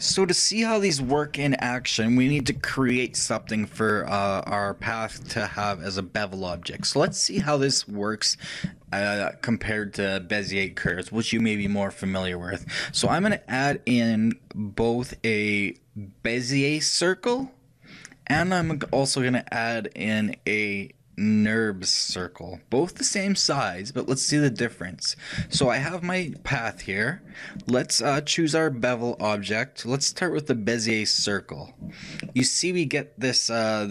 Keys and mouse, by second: 13.2 shift+a, 18.8 shift+a, 24.7-27.4 middle drag, 27.4-28.8 shift+drag, 29.2-31.0 drag, 32.4-33.9 middle drag.